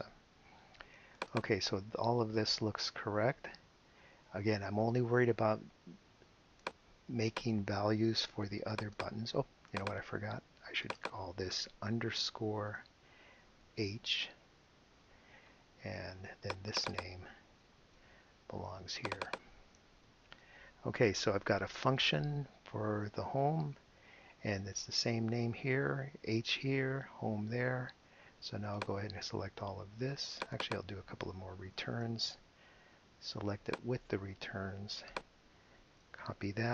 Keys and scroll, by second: 8.2 super+c, 12.5 shift+-, 14.5 h, 17.7 super+c, 20.2 super+v, 31.6 Return, 36.2 super+c.